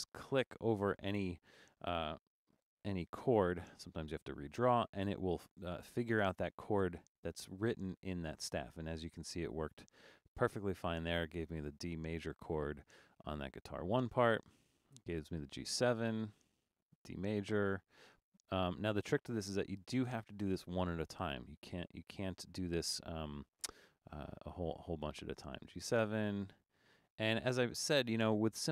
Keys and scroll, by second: 2.6 super+d.